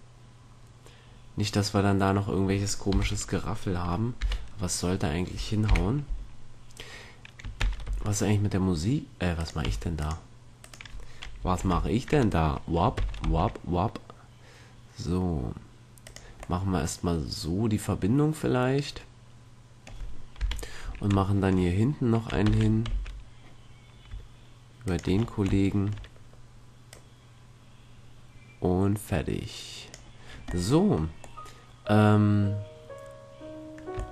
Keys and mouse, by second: 3.1 KP_3, 4.3 KP_1, 5.8 KP_5, 7.7 shift+d, 9.8 x, 10.7 right click, 11.2 right click, 11.7 ctrl+l, 13.1 shift+d, 16.6-18.6 drag, 20.5 KP_1, 21.5-22.6 drag, 22.6 shift+d, 25.3-26.8 drag, 27.5-29.0 drag, 30.8-33.9 middle drag.